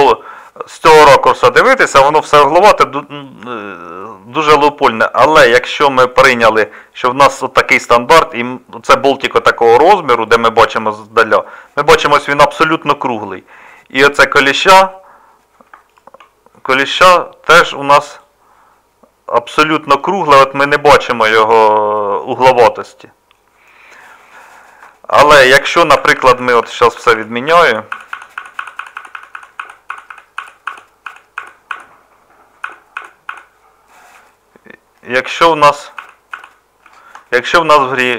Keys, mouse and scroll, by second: 26.0 ctrl+z, 26.2 ctrl+z, 26.5 ctrl+z, 27.1 ctrl+z, 27.7 ctrl+z, 28.8-34.1 ctrl+z, 35.6 ctrl+z, 36.0 ctrl+z.